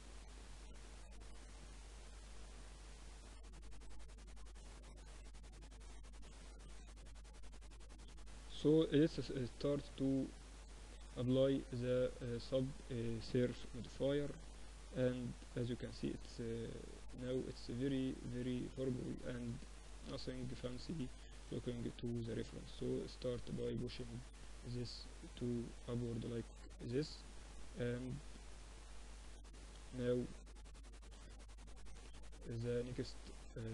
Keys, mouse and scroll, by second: 1.8 Tab, 2.8 Tab, 3.4-5.8 middle drag, 6.2 middle click, 6.8 Tab, 7.0-8.8 drag, 8.4 ctrl+2, 10.5-12.8 drag, 12.6 t, 13.2-15.2 drag, 13.4 t, 14.2-16.2 middle drag, 18.7-22.3 middle drag, 19.6 Tab, 20.8 ctrl+r, 22.8 ctrl+r, 25.9-27.9 middle drag, 26.3 ctrl+r, 27.9 Tab, 30.7 Tab, 32.0 ctrl+r, 33.6 Tab.